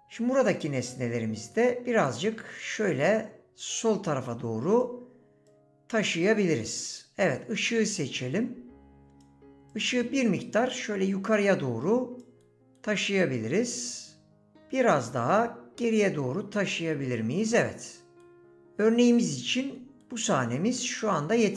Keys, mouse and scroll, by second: 8.3 click, 9.7 click, 18.3 middle click.